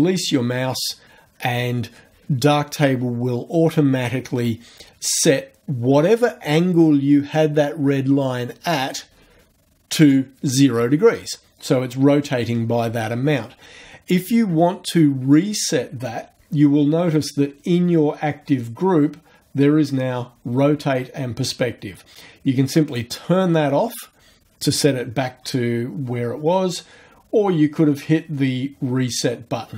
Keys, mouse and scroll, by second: 22.9 click.